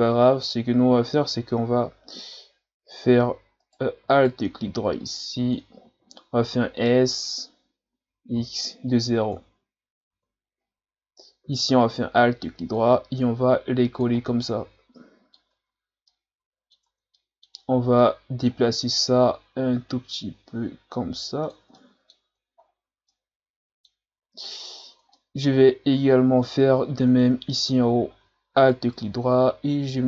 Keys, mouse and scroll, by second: 3.6 right click, 4.1 alt+right click, 5.0 click, 5.9 ctrl+z, 7.9 s, 11.8 alt+right click, 12.8-14.2 drag, 14.2 scroll down 3, 14.5-15.5 middle drag, 15.5 Tab, 16.1-16.9 middle drag, 16.9 Tab, 17.2 middle click, 17.6-18.0 scroll up 2, 18.0-19.2 middle drag, 19.2-21.8 drag, 21.8 middle click, 22.3 Tab, 22.6-23.1 scroll down 4, 23.1-24.2 middle drag, 24.2 scroll down 1, 24.4-24.9 scroll up 14, 25.2-26.7 middle drag, 26.7 scroll up 1, 27.1 Tab, 27.5-27.8 scroll down 2, 27.8 scroll up 1, 28.6 alt+right click, 29.3-30.0 drag.